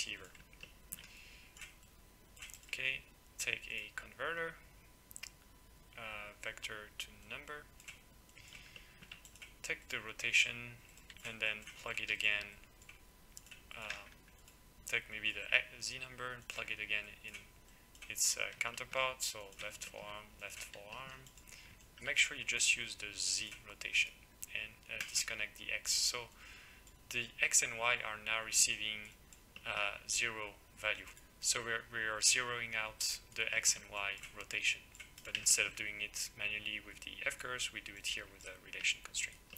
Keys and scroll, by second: 4.3 x.